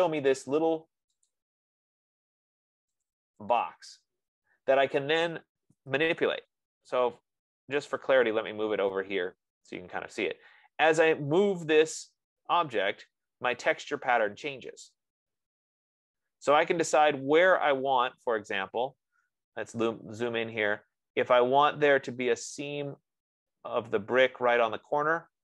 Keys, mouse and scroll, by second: 0.6 middle click, 1.8 click, 3.6 click, 6.0-7.2 typing, 8.7 click, 18.5-18.9 scroll, 19.5-20.8 scroll, 20.9-21.8 scroll.